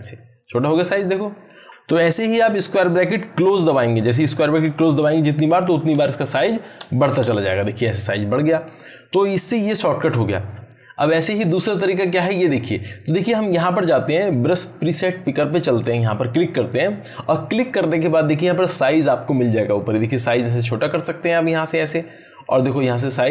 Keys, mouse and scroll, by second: 1.0-1.6 click, 4.2-7.2 typing, 8.1-8.7 drag, 15.6 click, 20.3-21.2 drag.